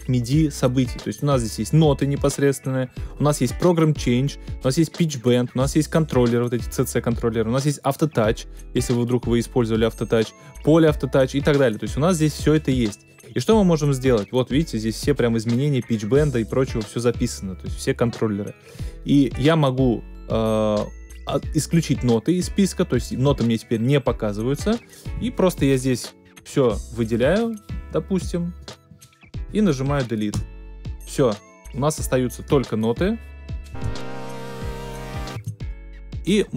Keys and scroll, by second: 30.3 BackSpace, 33.7 space, 35.3 space.